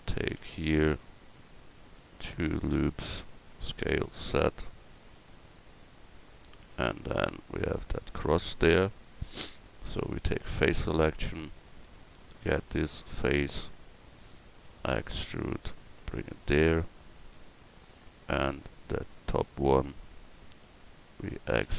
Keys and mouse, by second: 0.2 ctrl+r, 3.6 s, 10.5 click, 11.3 middle click, 13.6 click, 14.9 e, 15.8-17.9 drag, 21.6 e.